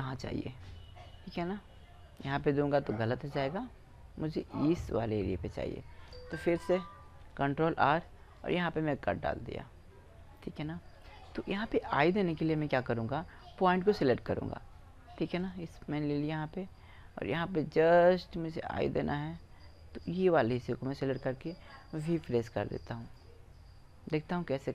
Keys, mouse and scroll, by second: 2.7-6.2 right drag, 6.9 ctrl+r, 10.2 click, 10.3-12.8 middle drag, 13.0 middle click, 15.1-16.9 drag, 19.8-21.9 drag, 22.3 v, 22.9 click, 24.0-24.7 drag, 24.0 right click.